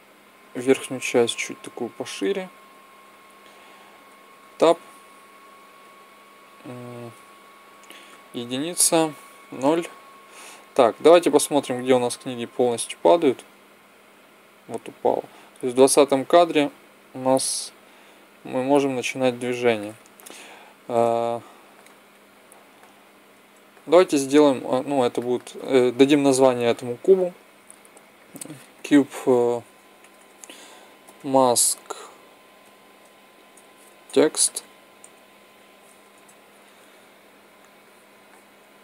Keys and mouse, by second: 0.5-2.3 drag, 4.3 Tab, 5.7 z, 7.0 z, 8.0 KP_1, 9.3 KP_0, 23.2-26.1 drag, 26.1 right click, 26.1 n, 27.7-29.5 right drag, 30.1 BackSpace.